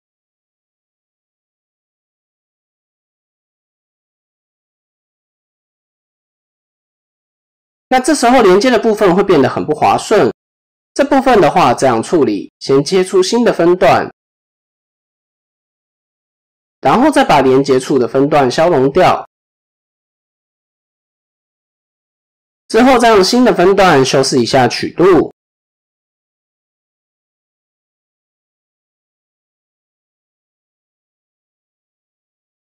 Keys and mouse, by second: 1.2-6.0 drag, 6.4 middle click, 7.2-8.2 middle drag, 8.9 middle click, 10.0 KP_7, 11.9 ctrl+r, 16.9 alt+click, 17.5 x, 19.2 shift+middle click, 20.6-22.0 drag, 23.2 click, 24.6 click, 25.5 click, 27.6 shift+middle click, 29.4 shift+middle click, 30.9 g.